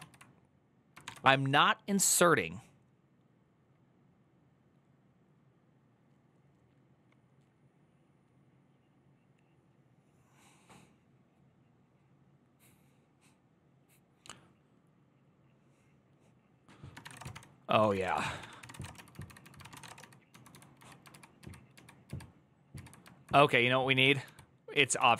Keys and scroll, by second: 0.0-0.1 typing, 0.8 ctrl+d, 16.8-21.1 typing, 17.8 Return, 18.2 ctrl+d, 18.4 ctrl+c, 21.1 ctrl+u, 21.8 ctrl+u, 22.9-25.1 typing.